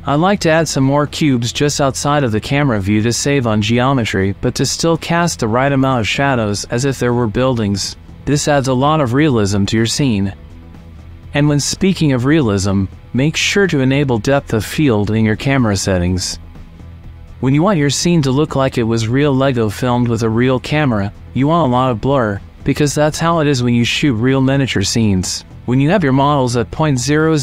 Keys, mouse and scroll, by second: 0.0 shift+d, 0.2 click, 0.5 g, 0.6 y, 1.8 s, 1.9 x, 2.4 click, 2.5 click, 3.2 middle click, 3.6 shift+click, 3.8 click, 4.2 alt+d, 5.0 click, 5.9 middle click, 6.3 click, 6.6 shift+middle click, 7.1 click, 8.2-11.3 drag, 11.6 click, 15.7-17.1 drag, 17.7 click, 22.0 middle click, 23.8-27.4 shift+middle drag.